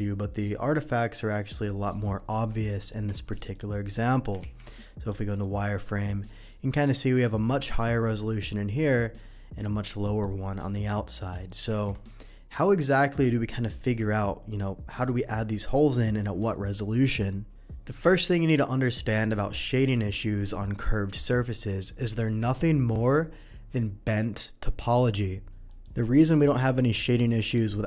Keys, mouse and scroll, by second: 1.3-1.8 middle drag, 2.6 middle drag, 3.3 middle drag, 4.4 alt+v, 4.9 click, 5.4-6.5 middle drag, 8.4-8.8 middle drag, 10.0 middle click, 11.6 alt+v, 12.0 click, 19.0 click, 25.7 middle click, 27.3 click.